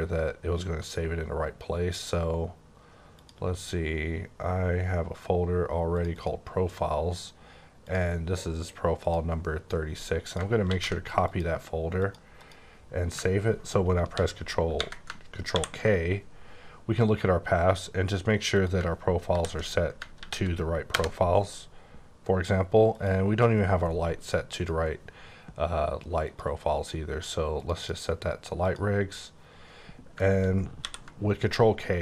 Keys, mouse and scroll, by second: 3.1 click, 6.0 click, 6.1 double click, 7.8 click, 8.9 click, 10.2 click, 10.6 ctrl+c, 11.2 click, 12.0 click, 12.4 click, 14.1 ctrl+m, 15.1 ctrl+m, 15.5 ctrl+k, 18.6 click, 19.3 ctrl+v, 20.1 ctrl+v, 20.8 KP_Enter, 23.0 click, 24.6 click, 26.3 click, 27.6 click, 27.7 double click, 28.6 click, 30.8 ctrl+k.